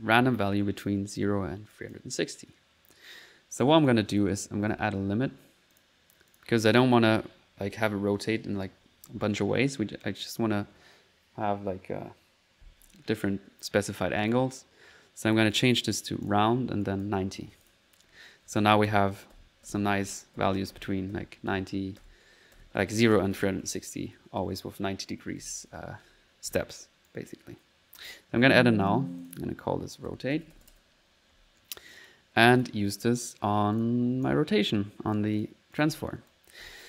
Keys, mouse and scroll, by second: 0.2 middle click, 0.6-1.3 typing, 1.7 click, 3.8 right click, 4.2 right click, 4.4-5.2 typing, 5.8 click, 6.3 click, 10.0 click, 14.2 click, 15.5 click, 16.3 click, 16.8 click, 17.4 click, 18.1-26.9 typing, 18.3 middle click, 26.7 middle click, 27.1 click, 28.1 alt+click, 28.5-29.3 typing, 28.9 alt+click, 31.4-31.9 typing, 31.9 click, 32.6 click, 33.8 click, 34.2-35.5 drag, 35.7-36.8 typing, 35.8 click, 36.3 click.